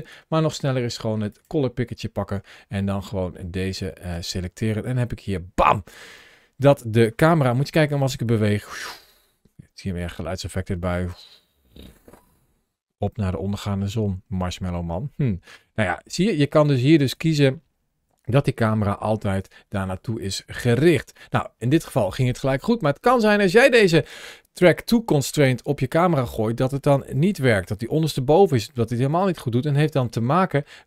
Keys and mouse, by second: 1.2 click, 6.0 middle click, 7.4 g, 16.9 click, 18.5 s, 19.2 click, 20.6-21.0 shift+middle drag, 27.0 g, 28.4 g, 28.9 click.